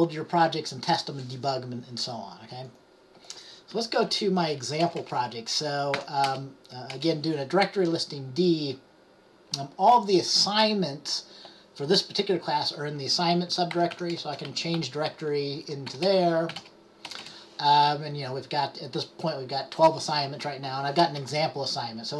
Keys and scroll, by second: 13.7-17.2 typing.